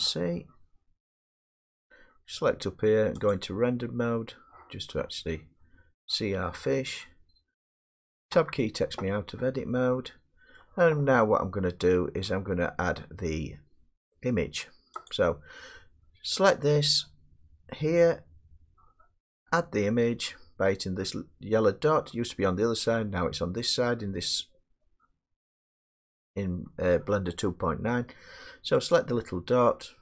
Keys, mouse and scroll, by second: 0.9-3.0 scroll, 3.3 click, 5.9-6.5 scroll, 6.5-7.3 scroll, 7.3 middle click, 8.3 Tab, 10.5 middle click, 12.3 middle click, 15.1 click, 28.9 click.